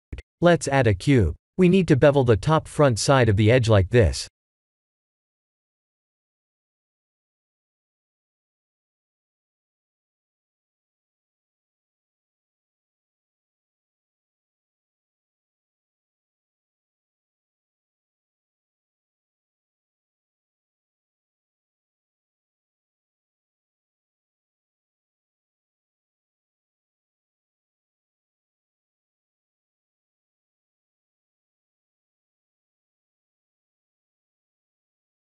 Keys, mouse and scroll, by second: 0.8 shift+a, 6.3-7.8 scroll up 5, 7.8 scroll down 1, 7.9 scroll down 1, 8.6-9.0 scroll down 4, 9.0 middle click, 9.1 middle click, 10.0 middle click, 11.9 middle click, 13.7 middle click, 14.5 KP_1, 15.1 KP_3, 16.0-17.5 scroll up 5, 17.6 Tab, 18.1 3, 18.4 click, 19.2 g, 24.7 click, 25.3 middle click, 26.4 2, 26.7 2, 27.1 click, 28.0 KP_3, 28.7 ctrl+b, 33.9 Tab, 34.3 middle click.